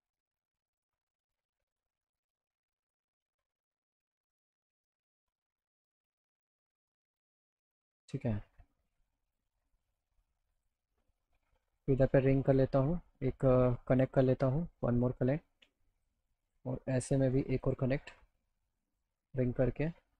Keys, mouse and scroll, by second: 1.1 click, 2.5-4.2 drag, 4.5 middle click, 6.9 click, 7.9 middle click, 9.3 click, 10.6 click, 11.7 click, 12.4 right click, 13.9 click, 15.2 click, 16.4 click, 17.5 click, 18.6 click, 19.4 right click.